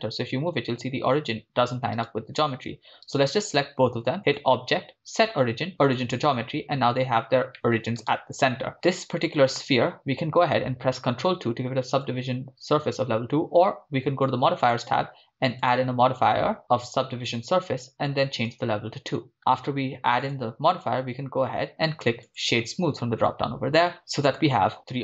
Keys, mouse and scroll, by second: 0.1 g, 2.0 right click, 3.2 shift+right click, 4.3-6.6 drag, 7.5 middle click, 8.7 right click, 9.9 right click, 10.9 ctrl+2, 12.0 click, 14.6 drag, 16.7-18.4 drag, 20.4-22.7 drag, 23.5-23.9 scroll up 2, 23.9 middle click, 24.7 scroll down 1.